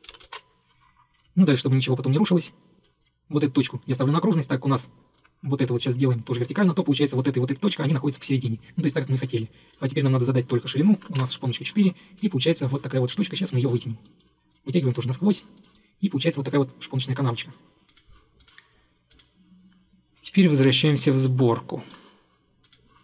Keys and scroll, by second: 0.0-0.8 typing, 1.2 Escape, 1.3 Escape, 11.2 4, 11.3 Return, 12.3 Escape.